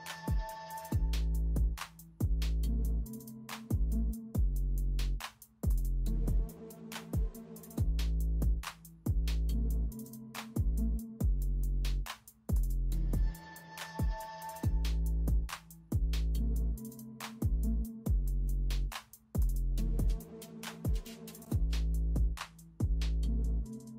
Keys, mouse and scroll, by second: 0.0-0.4 alt+scroll up 1, 1.0-1.3 alt+scroll down 1, 1.3 alt+scroll up 1, 1.9 space, 2.5 space, 2.9 alt+scroll up 1, 3.7 alt+click, 4.1 alt+scroll up 1, 4.4 space, 4.9 space, 6.0 alt+scroll down 1, 6.2 alt+scroll up 1, 6.5-6.9 alt+scroll down 1, 6.9 alt+scroll up 1, 7.3 space, 8.0 alt+click, 8.4 space, 8.7 alt+click, 9.0 space, 9.2-9.5 alt+scroll up 1, 9.5 alt+click, 11.4 space, 11.8-12.2 alt+scroll down 1, 12.2 alt+scroll up 1, 13.1 space, 13.8 ctrl+z, 13.8 space, 14.7 alt+click, 15.6 alt+click, 15.9 alt+scroll up 1, 16.3 alt+click, 17.1 alt+click, 17.6 alt+click, 17.8 alt+click, 17.9 alt+scroll down 1, 19.1 alt+scroll up 1, 19.4 ctrl+z, 20.0 alt+click, 20.7 space, 21.4 alt+click, 21.9 space, 22.6 alt+click, 23.4 alt+click.